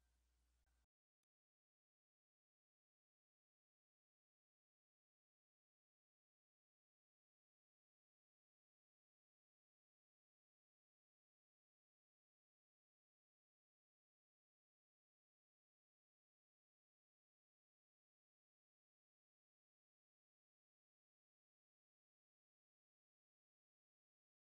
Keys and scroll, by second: 20.7 ctrl+Tab.